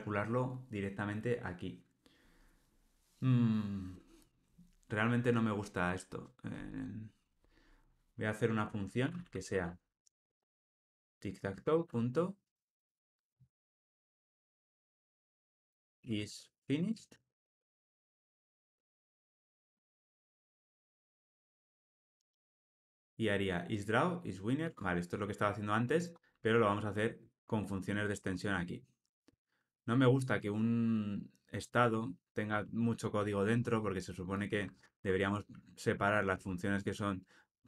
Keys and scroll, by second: 11.6 Return, 24.6 Tab, 27.2 alt+Return, 34.8 alt+Return.